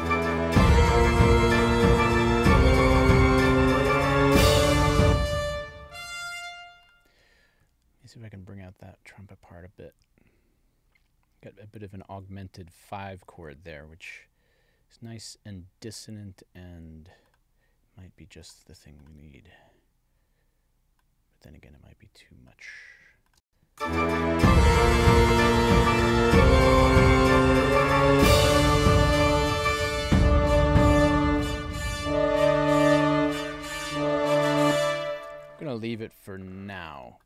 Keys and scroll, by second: 5.0 space, 23.3 space, 34.5 space, 35.3 super+s.